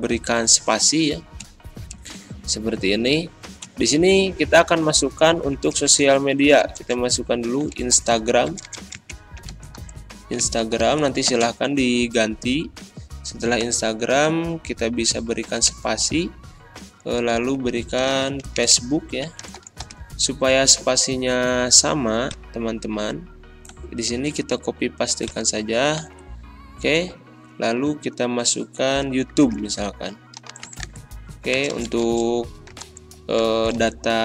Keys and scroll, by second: 5.5-6.8 typing.